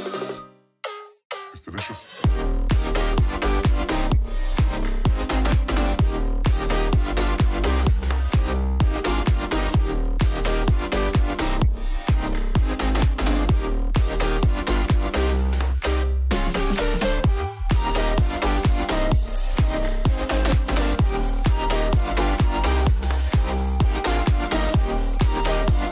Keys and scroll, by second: 1.5 super+-, 7.7 super+d, 13.3 super+d, 14.7 super+d, 25.4 super+=.